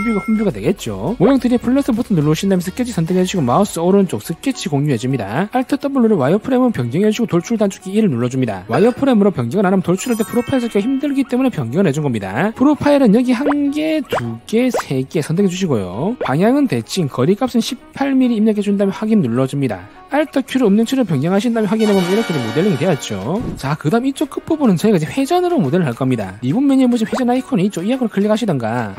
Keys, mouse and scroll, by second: 4.2 right click, 6.9 click, 13.7 click, 14.4 click, 15.2 click, 17.0 click, 17.5 click, 18.0 1, 19.6 click, 28.8 click.